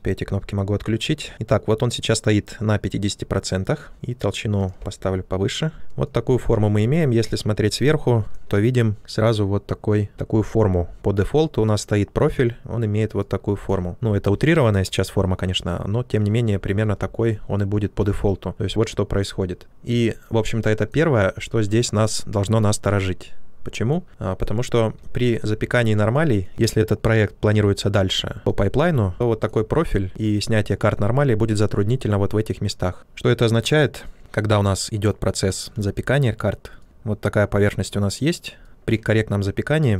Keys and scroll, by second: 16.8 ctrl+z, 28.0 ctrl+d, 28.4 shift+f, 33.4 space, 36.8 ctrl+z.